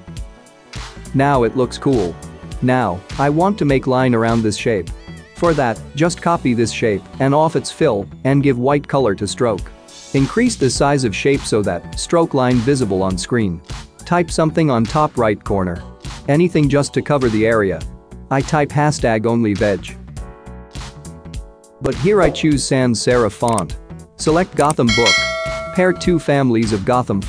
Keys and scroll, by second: 4.7 ctrl+j, 18.5-20.1 typing, 19.1 Caps_Lock.